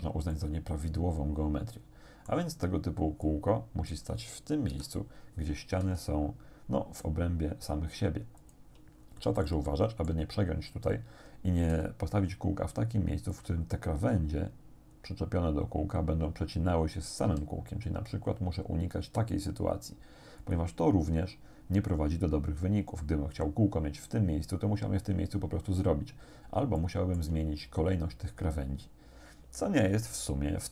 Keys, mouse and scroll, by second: 0.3-2.5 middle drag, 3.3 click, 4.7 KP_7, 5.9 g, 8.4 click, 9.0 scroll up 1, 9.5 shift+middle click, 11.7 g, 13.3 click, 17.3 g, 20.5 click, 26.3-26.7 scroll down 2, 26.8 shift+right click.